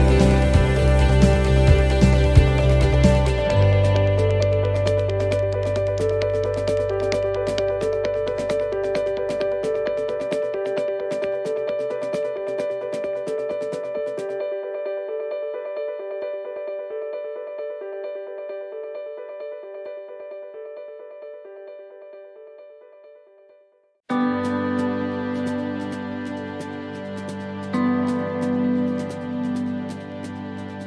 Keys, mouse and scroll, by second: 0.2 scroll up 3, 2.4 shift+middle click, 6.1 middle click, 10.3 middle click, 10.9-11.6 scroll down 4, 11.6 middle click, 12.1 shift+middle click, 13.3 middle click, 14.8 ctrl+r, 17.2 middle click, 17.8 shift+middle click, 18.1-18.7 scroll up 5, 21.5 middle click, 21.9-22.7 scroll down 7, 22.5 middle click, 25.0 click, 27.8 click, 27.8 right click, 28.9 e.